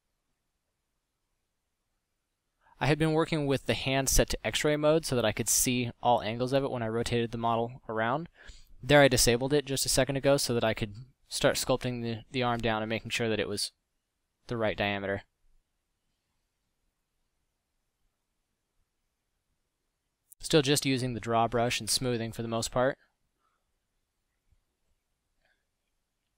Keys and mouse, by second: 1.4 click, 1.5 a, 2.6 a, 8.2 f, 8.9 middle drag, 17.4 click, 17.8 f, 18.8 f.